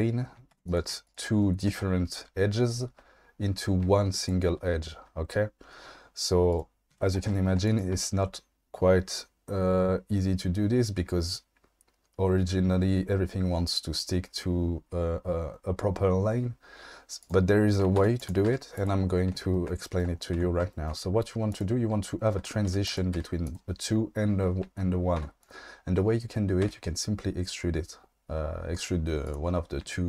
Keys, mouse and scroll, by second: 0.5 2, 0.7 click, 4.6 shift+d, 6.9 1, 7.6 click, 7.9 g, 17.2 click, 18.0 2, 18.2 click, 18.4 g, 20.3 1, 21.5 click, 22.7 2, 23.1 g, 23.4 click, 25.2 1, 26.6 e, 29.2 click.